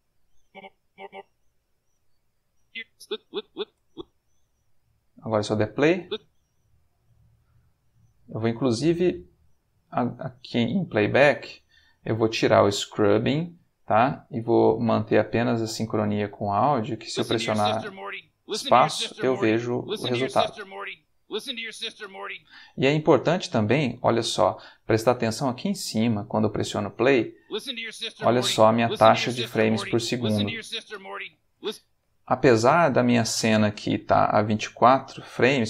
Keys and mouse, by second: 0.4 click, 1.4 alt+g, 2.5 click, 3.7 space, 5.8 space, 11.3 click, 12.8 click, 14.7 click, 16.4 click, 17.0 space, 22.3 space, 27.0 space, 31.5 space, 33.1 click.